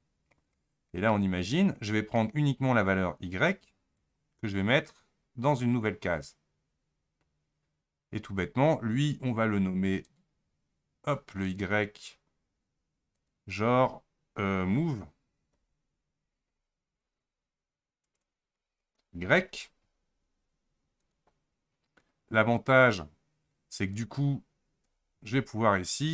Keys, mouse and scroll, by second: 5.8-21.0 drag.